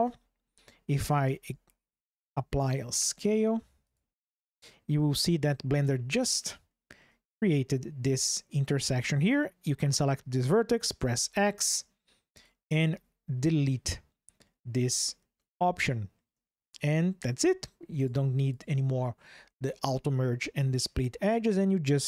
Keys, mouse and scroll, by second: 0.0 ctrl+shift+\, 1.2 s, 3.6 click, 5.1 shift+click, 5.8 middle click, 6.4 shift+click, 9.0 click, 10.7 x, 14.2-15.9 shift+drag, 18.3 click.